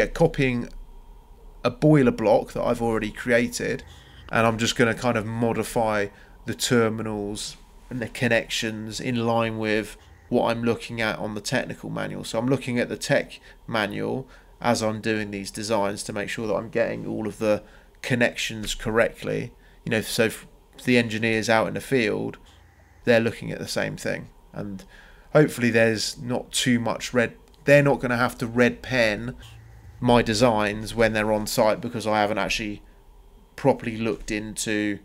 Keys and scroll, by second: 3.3 ctrl+c, 5.3 m, 5.7 Return, 7.0 Escape, 11.2 c, 11.9 Return.